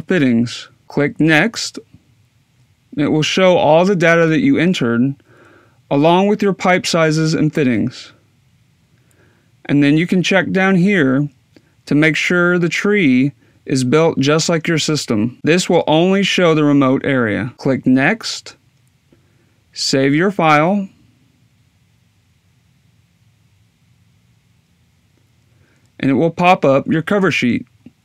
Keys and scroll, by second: 18.7-22.0 typing.